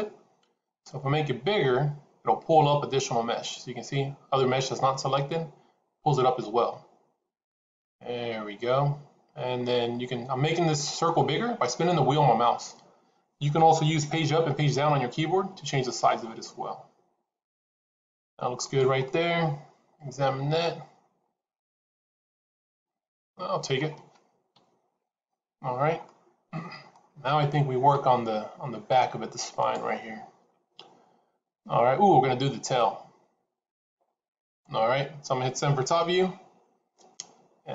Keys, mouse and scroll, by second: 18.9 middle click, 24.4 KP_1, 25.9 middle click, 35.8 KP_7, 36.8 scroll down 1.